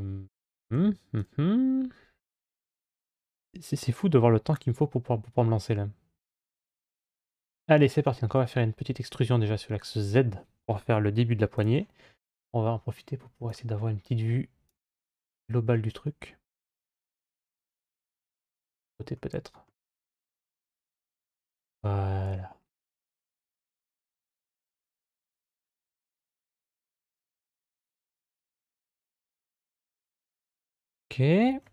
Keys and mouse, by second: 0.6 3, 1.0 right click, 7.9 e, 13.3-14.5 drag, 16.0-17.6 middle drag, 18.1 middle click, 19.7 middle click, 23.0 g.